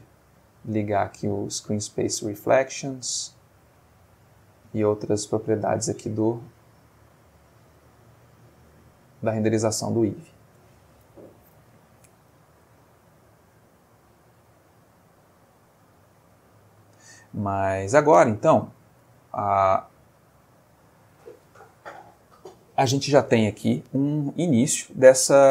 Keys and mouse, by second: 1.1 click, 2.1-2.8 middle drag, 3.6 click, 4.0 click, 4.6-6.1 middle drag, 13.5 click, 15.5 click, 19.3 click, 20.6 click, 24.2-25.5 middle drag.